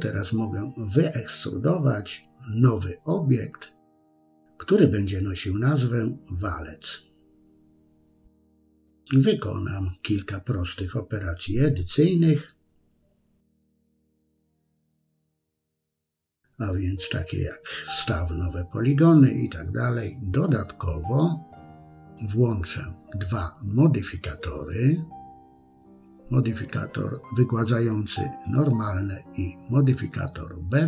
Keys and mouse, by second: 1.7 KP_3, 2.4 middle click, 3.0 s, 4.1 KP_3, 4.9 e, 7.4 middle click, 8.4 ctrl+b, 10.0 middle click, 11.2 click, 11.9 i, 12.6 middle click, 13.9 e, 15.0 s, 15.7 middle click, 16.3 Tab, 20.6-21.8 drag, 23.2 click, 24.3 click, 24.8-26.5 drag, 27.8 click, 29.0-29.8 drag, 30.5-30.8 drag.